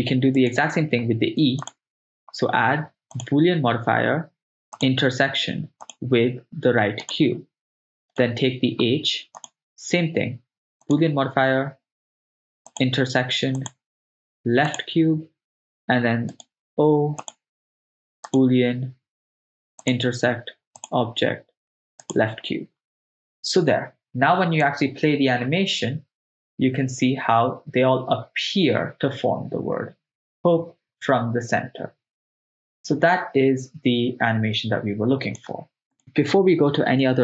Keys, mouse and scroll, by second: 0.6-3.3 drag, 0.6 right click, 4.8 drag, 5.9 click, 8.3 right click, 9.4-11.0 drag, 12.8 click, 13.6 click, 16.5 right click, 17.3-18.6 drag, 19.9 click, 20.8 click, 24.8-35.5 drag, 36.0-37.2 drag, 36.0 right click.